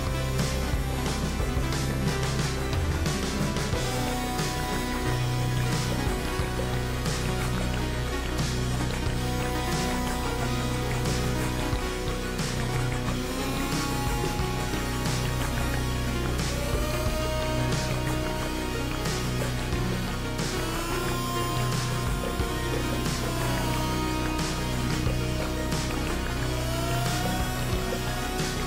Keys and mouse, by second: 0.4 alt+z, 0.8-4.4 drag, 6.4 alt+z, 6.8 w, 6.9 w, 7.8 click, 10.1 o, 11.2 g, 24.0-25.1 drag, 25.5 ctrl+z, 26.5 shift+click, 27.0 shift+click, 27.8 click.